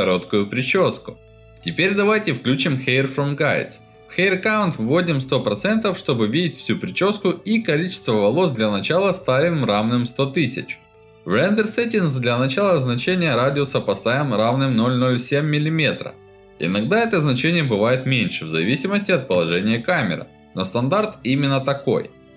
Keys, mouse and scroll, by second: 1.6 click, 2.0 alt+middle click, 3.6-4.7 typing, 5.4 alt+Return, 5.6-7.5 alt+middle drag, 9.0 click, 12.4-16.0 alt+middle drag, 12.7 alt+Return, 16.3-21.4 alt+middle drag, 21.8-22.3 ctrl+alt+middle drag.